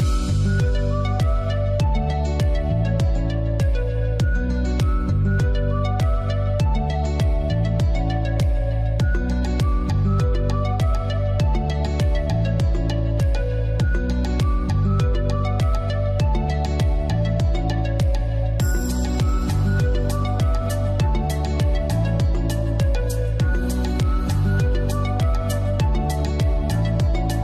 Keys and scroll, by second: 7.1 ctrl+d.